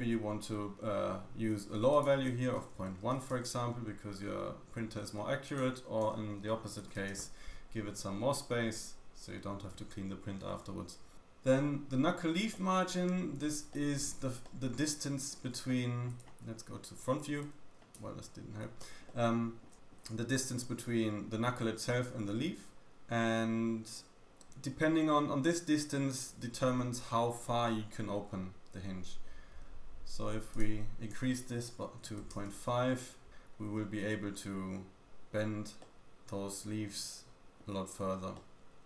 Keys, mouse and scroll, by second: 1.9 click, 2.4 click, 5.4 click, 12.5 middle click, 13.6-14.2 shift+middle drag, 14.9-15.5 scroll up 2, 15.6-16.1 shift+middle drag, 17.4 scroll up 1, 18.0 `, 18.8 Escape, 19.0 middle click, 19.8 shift+middle click, 19.8 scroll up 1, 23.7-25.0 scroll down 2, 27.2-30.2 scroll down 1, 30.5 click, 35.8 middle click, 36.0 middle click, 37.4 middle click, 37.8-38.3 scroll up 1, 38.3 middle click.